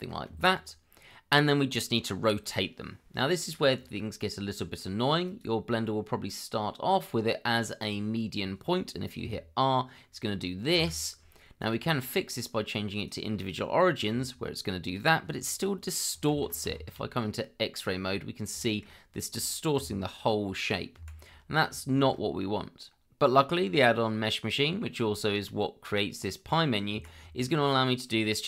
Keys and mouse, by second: 0.3 Escape, 5.2-7.9 drag, 9.2 r, 10.7 Escape, 11.6-13.1 drag, 14.1 r, 15.5 click, 16.3 ctrl+z, 16.8 shift+z, 17.9 shift+middle click, 18.6 shift+middle click, 19.7 r, 20.9 Escape, 21.9 shift+z, 25.2 Tab.